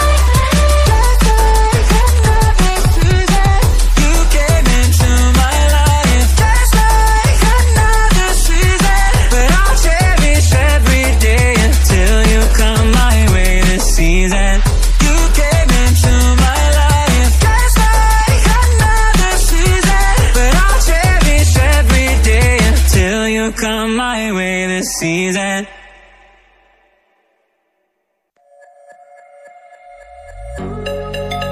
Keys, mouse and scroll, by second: 1.1 Tab, 1.8 ctrl+r, 4.2 ctrl+r, 5.6 click, 7.3 alt+click, 8.0 typing, 9.2 click, 9.4 click, 10.0-11.4 typing, 14.1 Tab, 15.5 click, 16.2 click, 16.8-17.9 drag, 18.4 Tab, 19.2 click, 20.1 drag, 21.0 click, 21.4 Tab, 21.7 Tab, 22.3 click, 23.0 Tab, 23.6 click, 23.9 Tab, 24.3 click, 24.9 click, 25.5 click, 25.7 Tab, 26.2-26.6 drag, 27.2-28.9 drag, 29.3 drag, 29.9 click, 31.2 click.